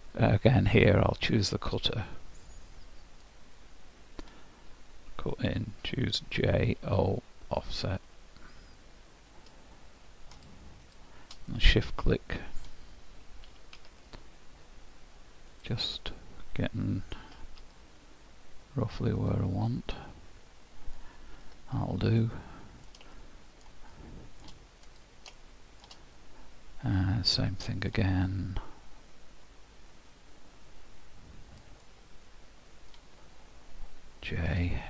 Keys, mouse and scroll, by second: 1.0 click, 3.6 middle click, 11.5 middle click, 13.5 s, 16.0 middle click, 17.3 g, 19.7 middle click, 21.5 h, 22.2 middle click, 23.1 shift+scroll up 1, 23.7 shift+scroll down 1, 24.9 click, 25.4 shift+middle click, 26.1-26.8 scroll up 3, 27.0 middle click, 29.9 click, 31.9 middle click.